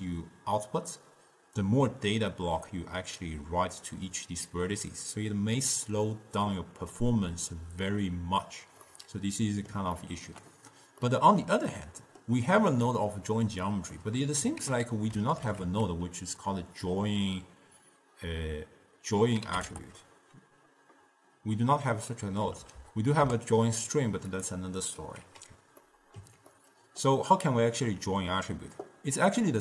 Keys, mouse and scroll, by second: 8.9-11.1 middle drag, 11.1 scroll down 2, 11.2-13.0 middle drag, 13.0 click, 14.0 middle click, 14.7 ctrl+a, 19.8 t, 22.7 BackSpace, 22.8 BackSpace, 25.3 x, 25.9 scroll up 2, 25.9-29.4 middle drag, 29.4 click.